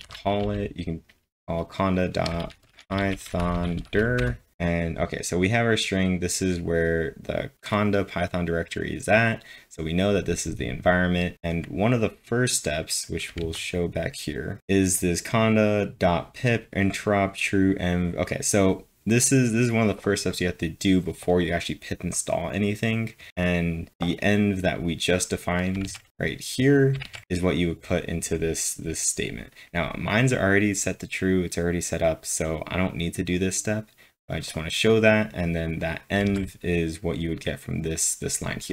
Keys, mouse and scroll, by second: 0.0-0.5 typing, 2.0-4.6 typing, 13.0-13.8 typing, 14.9-15.3 scroll down 1, 15.3 click, 17.4 click, 19.5 click, 23.4-30.0 drag, 25.8 alt+Tab, 27.0 alt+Tab, 30.0 click, 33.3-36.3 drag, 36.2 alt+Tab, 37.4-38.7 typing.